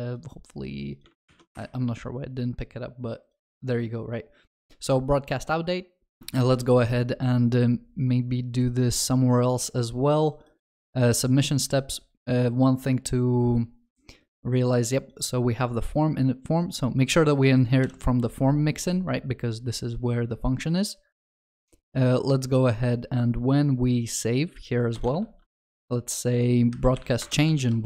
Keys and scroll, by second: 6.4 ctrl+c, 17.8 ctrl+b, 25.2 ctrl+v.